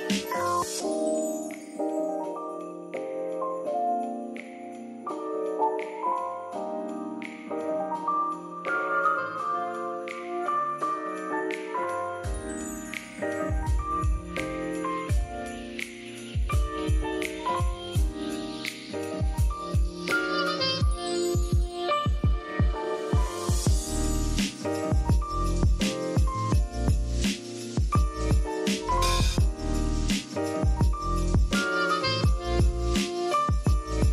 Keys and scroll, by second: 0.3 m, 4.0 shift+super+}, 7.3 v, 8.5 v, 15.4 super+x, 16.0 super+v, 26.2 z, 26.6 v, 30.6 p.